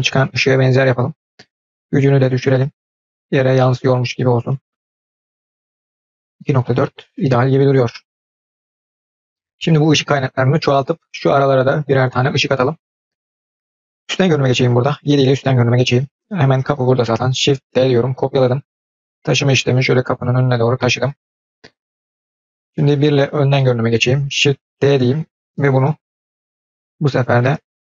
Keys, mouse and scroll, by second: 0.6-1.8 drag, 2.6-6.0 drag, 12.2-12.8 scroll down 1, 12.8-13.4 scroll down 1, 13.4-13.9 middle drag, 15.3-16.8 scroll down 2, 15.3 KP_7, 17.6 shift+d, 23.0 KP_1, 23.6-23.9 scroll up 3, 24.7 shift+d.